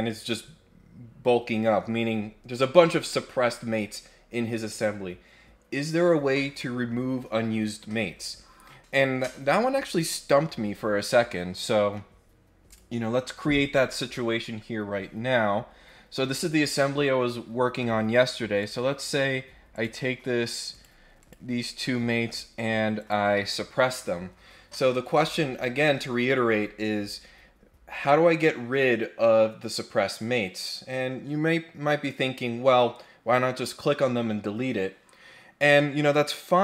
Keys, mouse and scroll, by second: 12.7 click, 18.6 click, 19.7 click, 20.7 click, 21.2 click, 22.2 click, 22.9 click.